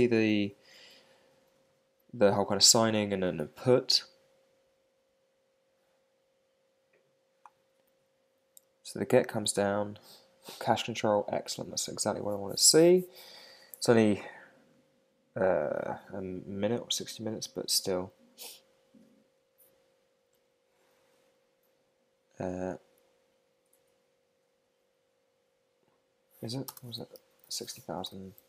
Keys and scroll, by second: 26.7 super+space.